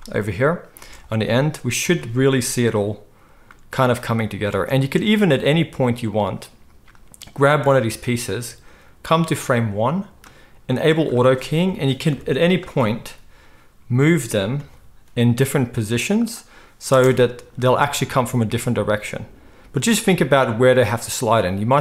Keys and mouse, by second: 0.8 space, 1.9 alt+a, 4.5 space, 5.2-8.0 middle drag, 8.0-11.0 drag, 11.0-21.1 middle drag, 12.1 KP_7, 14.6 g, 16.9 space, 21.1-21.7 drag, 21.1 space, 21.7-21.8 middle drag.